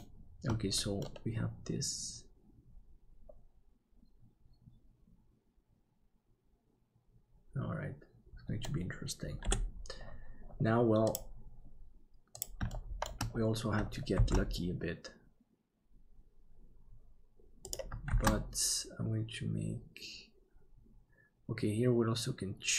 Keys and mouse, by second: 1.0-8.6 middle drag, 9.4 KP_7, 12.7 shift+middle click, 14.2 shift+d, 18.1 shift+d.